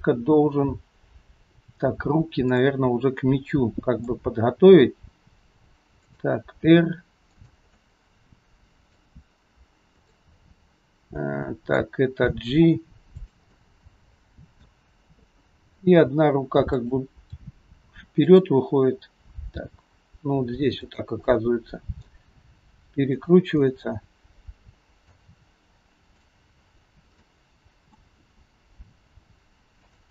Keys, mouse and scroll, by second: 2.6 click, 3.1 scroll up 1, 3.2 middle click, 4.7 g, 6.7 r, 7.7 middle click, 10.0 click, 11.2 middle click, 12.2 g, 13.6 middle click, 15.8 g, 17.5 r, 19.6 g, 21.2 middle click, 22.4 r, 23.6 middle click, 26.3 click, 26.9-27.3 scroll down 2, 27.3 middle click, 28.2 r.